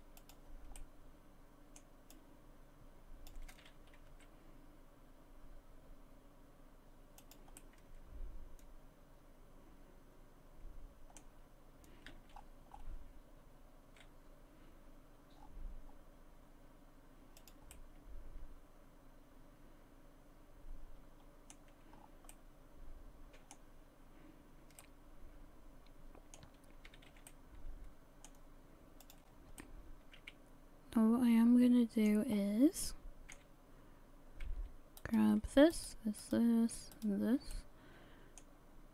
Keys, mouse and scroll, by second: 0.3 click, 0.8 middle click, 2.1 click, 4.1 s, 7.6 middle click, 12.1 r, 17.7 middle click, 21.4 middle click, 22.0-22.3 scroll down 4, 22.3 middle click, 24.8 middle click, 26.9 a, 27.1 a, 27.3 middle click, 28.0 middle click, 29.0 click, 29.6 middle click, 30.7 middle click, 32.3 scroll up 2, 32.8 middle click, 35.0 right click, 35.7 shift+right click, 36.2 right click, 36.9 shift+right click, 37.5 middle click.